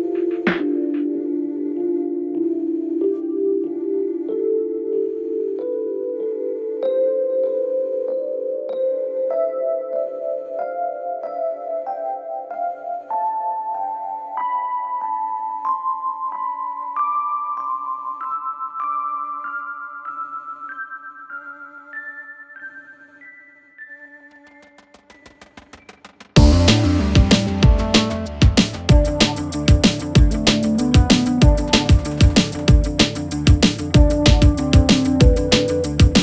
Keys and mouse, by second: 0.7 click, 3.4 3, 3.5 click, 5.4 2, 6.3 ctrl+b, 14.4-17.6 drag, 14.4-17.6 middle drag, 14.4-17.6 right drag, 19.6 3, 19.9 click, 22.3 i, 24.2 e, 27.3 e, 28.0 s, 29.7 e, 32.6 click, 33.1 shift+middle click, 34.2 middle click, 35.0 shift+middle click, 36.1-36.2 middle drag.